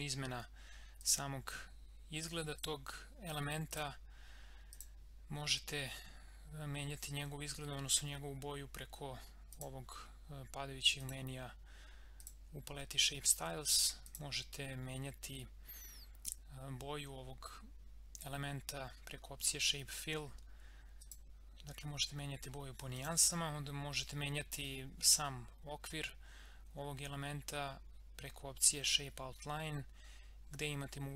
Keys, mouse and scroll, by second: 1.0 click, 5.4-6.4 scroll down 1, 9.5 click, 21.0 click.